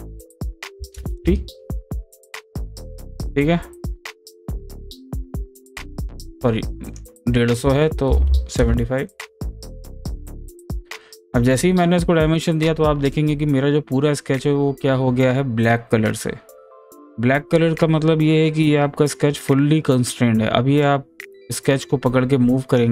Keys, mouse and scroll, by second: 1.6 click, 4.8-6.9 drag, 10.1 click, 20.8-22.9 drag.